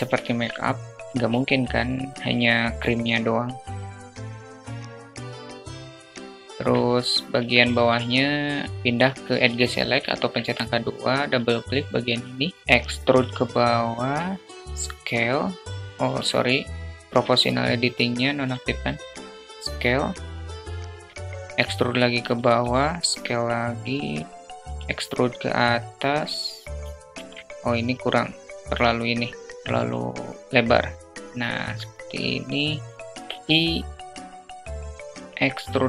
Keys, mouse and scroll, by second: 4.1 s, 5.2 click, 5.6 click, 6.1 click, 6.5 Tab, 8.7 alt+2, 8.7 alt+middle click, 9.2 click, 9.5 click, 12.0 alt+click, 12.6 e, 13.2 s, 16.3 click, 17.5 s, 19.6 e, 21.2 s, 23.3 e, 25.7 ctrl+z, 27.3 s, 28.8 s, 29.9-31.1 drag, 33.7 e.